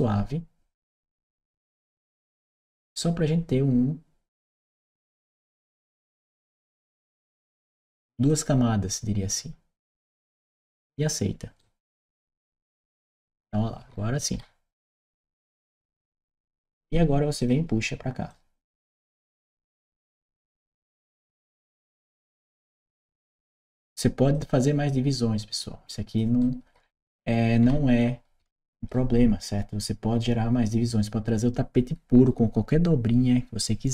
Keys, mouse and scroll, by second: 5.6 click, 8.1 click, 11.4-16.0 right drag, 17.3 click, 18.2-19.2 drag, 19.4-20.9 right drag, 22.0-23.6 drag, 24.2-26.0 drag, 26.2-28.7 right drag.